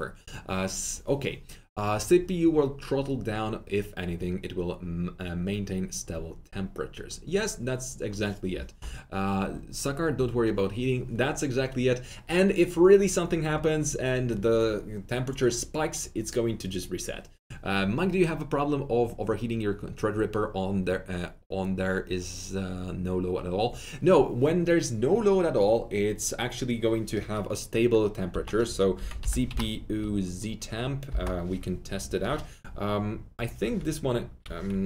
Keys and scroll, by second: 28.2-29.9 typing, 31.0 Return.